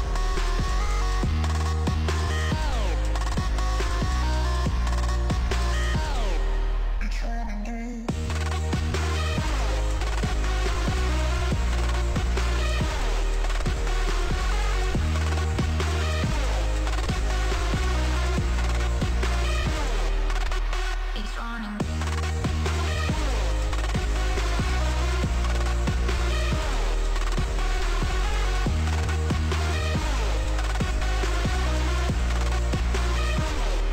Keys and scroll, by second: 0.9 f, 7.9 m, 15.3 v, 20.0 ctrl+z.